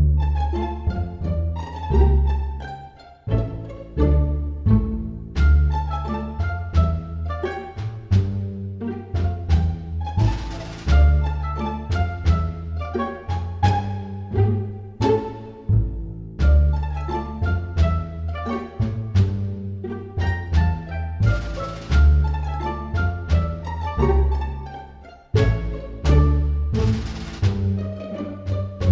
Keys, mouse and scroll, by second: 1.0 click, 6.1 click, 9.0 click, 13.6 click, 15.8 click, 21.1 middle click, 22.2 super+z, 22.6 click, 23.5 x, 25.1 middle click, 26.2 click, 27.4 s.